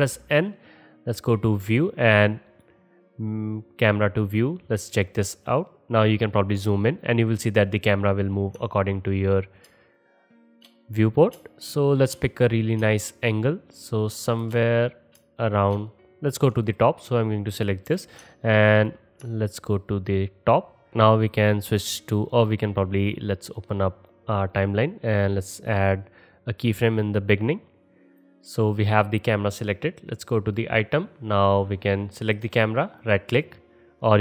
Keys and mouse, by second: 1.4 click, 2.5 click, 5.0 middle click, 17.9 KP_Decimal, 23.4-30.3 drag, 30.3-33.0 middle drag, 33.0-34.2 drag.